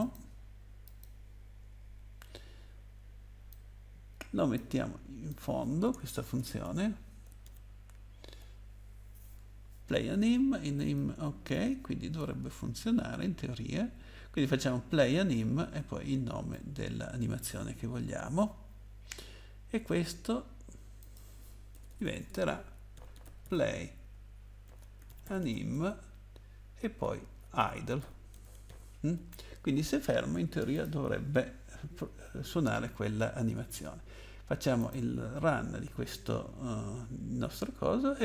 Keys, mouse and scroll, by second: 0.0 click, 0.8 click, 1.1 click, 1.9 scroll down 1, 3.5 click, 5.3 click, 5.4 click, 6.4 Return, 6.4 BackSpace, 6.6 BackSpace, 7.4 ctrl+v, 10.7 click, 11.4 click, 16.5 click, 21.0 click, 21.1 click, 21.7 BackSpace, 21.9 BackSpace, 22.9-25.7 typing, 26.8-28.6 typing, 30.7 click, 34.8 click.